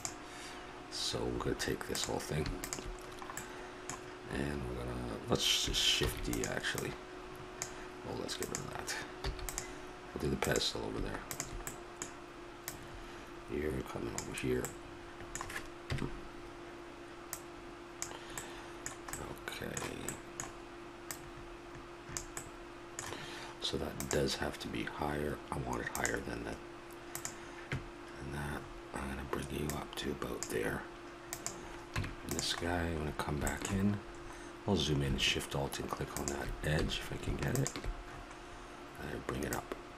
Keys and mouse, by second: 0.9-1.9 middle drag, 1.9-3.1 right drag, 3.1 click, 3.4-5.3 middle drag, 6.0 shift+d, 6.7-14.6 drag, 9.2 x, 14.7 middle click, 15.8 KP_Decimal, 17.3 click, 18.4-21.1 middle drag, 21.1-22.5 drag, 22.5 middle click, 29.7-33.5 drag, 31.9 Tab, 36.1-39.9 drag, 36.8 a, 38.4 middle click.